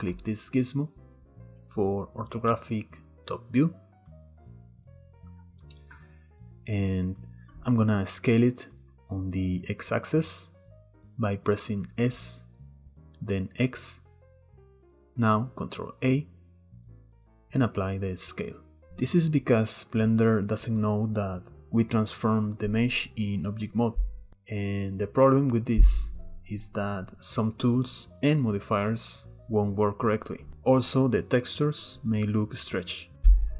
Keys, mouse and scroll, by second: 1.9 click, 6.0-6.3 scroll up 1, 6.3 shift+middle click, 10.6 s, 17.3 ctrl+a, 22.7-33.1 shift+middle drag, 33.1 Tab, 33.1 click.